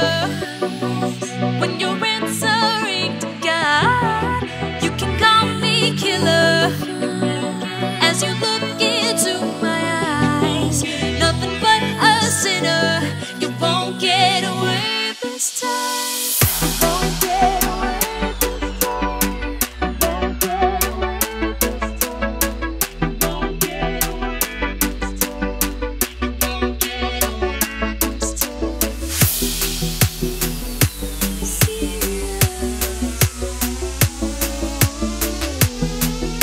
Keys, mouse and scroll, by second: 0.1 click, 0.2 right click, 1.0 click, 3.3 alt+Tab, 3.8 alt+click, 4.5 ctrl+c, 4.7 Tab, 5.8 click, 8.6 Right, 10.0 click, 10.2 Left, 11.9 click, 12.0 Left, 13.3 click, 13.6-14.3 scroll down 1, 14.3 click, 14.7 Delete, 15.0 click, 15.8-16.2 scroll up 1, 16.5 scroll down 1, 17.5 click, 19.9 click, 21.4 Return, 21.7 right click, 22.7 click, 23.3 Left, 24.7 alt+scroll down 1, 25.5 click, 29.8 Return, 31.3 click, 35.0 KP_5, 35.9 click.